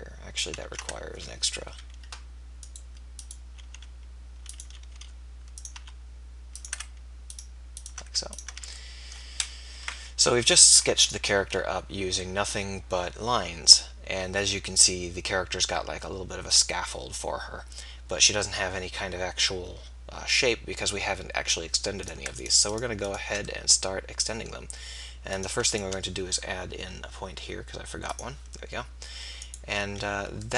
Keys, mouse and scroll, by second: 0.2 click, 0.8 ctrl+z, 1.7 KP_3, 3.8 r, 5.1 e, 5.9 e, 8.7 f, 9.9 KP_4, 11.2 KP_1, 25.4-28.0 right drag, 28.0-30.5 drag.